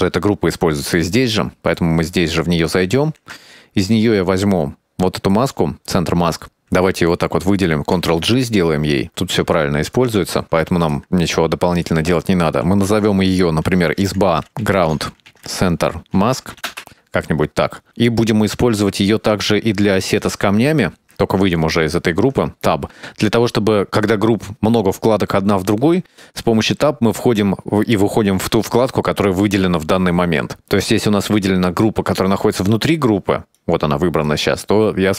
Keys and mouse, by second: 1.6 middle click, 3.0 click, 3.4 Tab, 5.2 middle click, 6.8 click, 7.0 shift+click, 7.1 shift+click, 7.3 shift+click, 7.5 shift+click, 8.4 ctrl+g, 9.5 middle click, 10.0 click, 11.2 click, 12.0 Tab, 12.5-17.4 drag, 19.6 click, 21.1 Tab, 22.2 Tab, 23.6 middle click, 25.2 t, 33.7 right click.